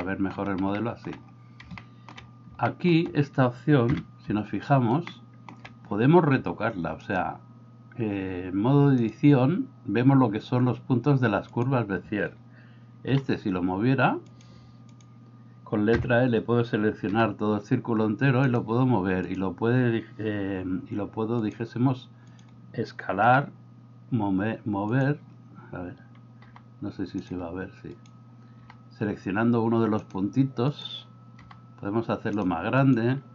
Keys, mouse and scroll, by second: 0.1 shift+middle click, 0.8 shift+middle click, 1.8 shift+middle click, 2.8 middle click, 4.0 KP_7, 5.1 middle click, 7.1-9.2 drag, 13.1 g, 15.9 l, 17.3 g, 23.2 g, 26.6 g, 28.6 g.